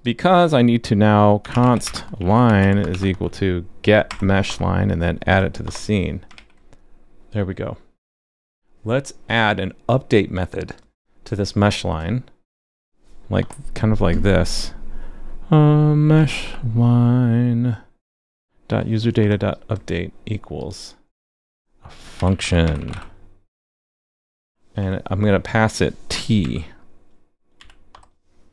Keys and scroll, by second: 6.3 super+s.